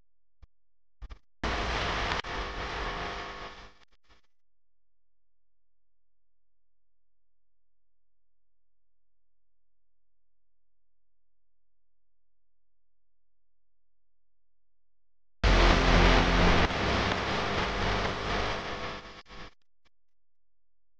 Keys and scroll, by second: 11.6 super+c, 14.0 super+f, 16.7 super+7, 17.8 space.